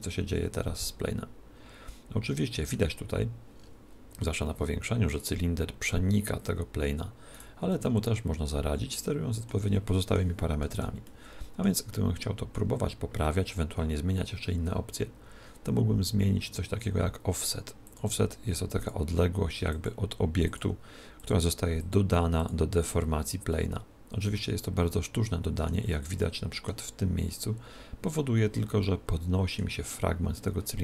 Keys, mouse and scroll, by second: 3.2 middle click, 3.6-4.7 scroll up 3, 3.7 middle click, 4.0 middle click, 4.7-5.2 scroll up 1, 5.2 right click, 5.8 middle click, 7.5 right click, 8.9-17.9 middle drag, 10.7 z, 12.5 z, 17.9-24.1 drag, 23.5-25.3 middle drag, 26.2-28.1 middle drag, 28.9-30.8 middle drag.